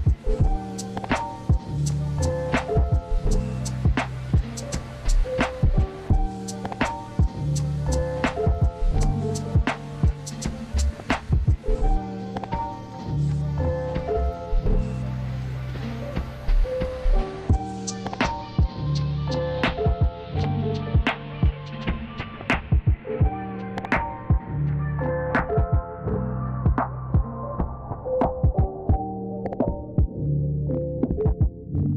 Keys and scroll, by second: 0.0-0.2 typing, 1.5 space, 2.2 space, 3.2 space.